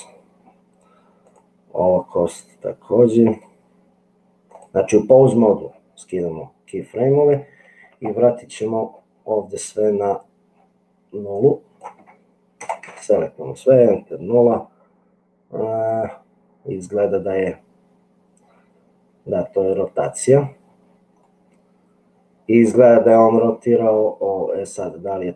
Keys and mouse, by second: 11.5-13.5 drag, 21.4-22.5 middle drag.